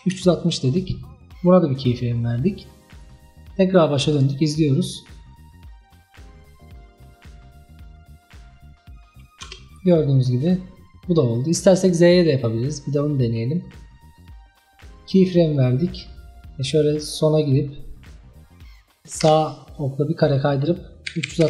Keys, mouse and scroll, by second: 3.0-7.2 drag, 9.5 space, 13.2-15.6 drag, 17.5 click, 19.3 Right, 20.4-21.4 drag.